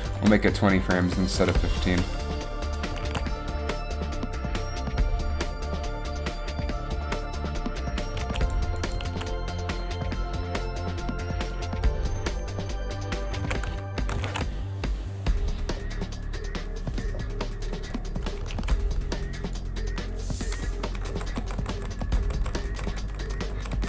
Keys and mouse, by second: 0.3 g, 1.5 a, 3.2 alt+a, 4.4 a, 8.4 alt+a, 9.2 alt+a, 13.5 alt+a, 14.1 shift+Left, 14.3 alt+a, 18.8 alt+a, 21.1-23.4 Right, 23.5 Right, 23.7 Right.